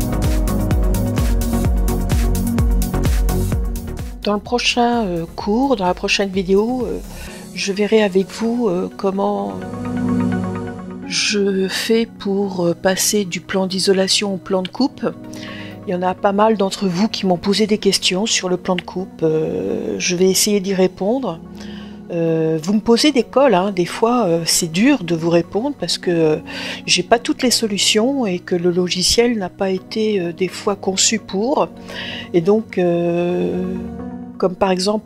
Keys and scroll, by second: 19.4 Return, 32.1 BackSpace.